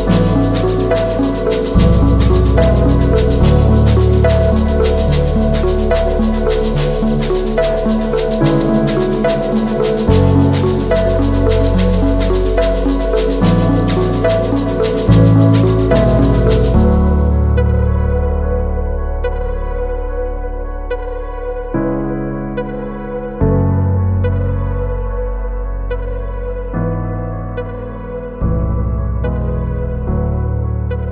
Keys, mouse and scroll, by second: 3.4 ctrl+t, 4.4 alt+shift+click, 7.2 Return, 7.8 Down, 23.8 alt+click, 31.0 right click.